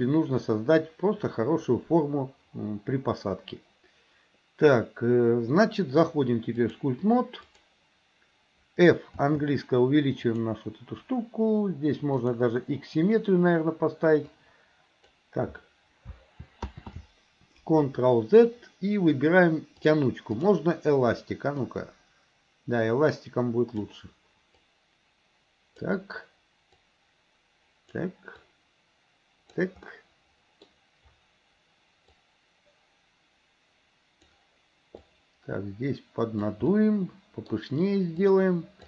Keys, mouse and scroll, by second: 6.6-7.8 drag, 9.1 f, 12.2 click, 14.3 click, 16.7 ctrl+z, 20.5 click, 21.7-23.9 drag, 24.6-26.0 drag, 26.8-28.0 drag, 28.5-29.7 drag, 29.9 middle click, 32.2-34.3 drag, 35.1-36.6 drag, 36.7 middle click, 38.3 click.